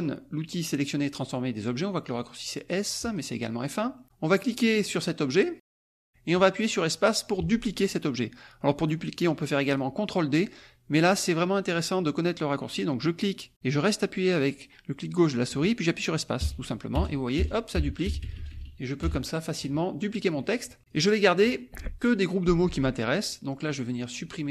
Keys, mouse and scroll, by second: 3.0 click, 4.8-9.9 drag, 10.9-12.4 drag, 13.1-19.8 drag, 16.4 space, 20.1 click, 20.8 click, 23.7-24.5 drag.